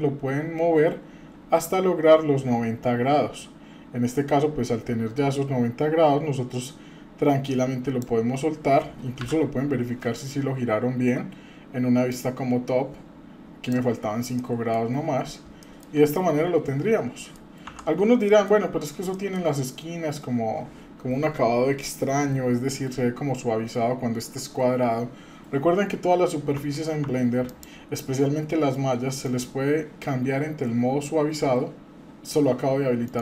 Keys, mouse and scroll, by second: 9.2 KP_7, 10.6-11.1 scroll up 2, 12.1-13.8 ctrl+drag, 14.4 middle click, 14.8-15.5 scroll down 4, 15.6 shift+middle click, 16.2-17.3 middle drag, 17.7 Tab, 18.2 middle drag, 18.7-19.0 scroll up 2, 19.1 shift+middle drag, 19.7-20.1 scroll up 2, 20.1-22.2 scroll down 2, 26.6 Tab, 27.0 Tab, 27.4 click, 29.2-32.2 right drag, 33.0-33.2 right drag.